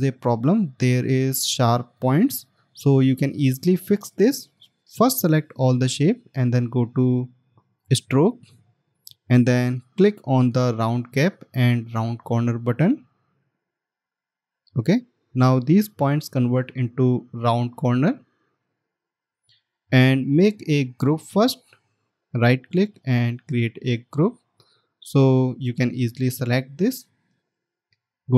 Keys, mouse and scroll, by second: 0.5 alt+scroll up 1, 22.0 right click.